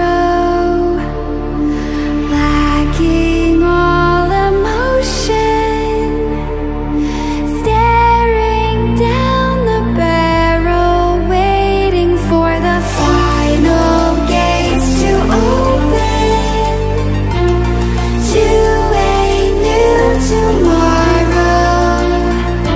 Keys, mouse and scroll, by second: 1.2-22.7 drag.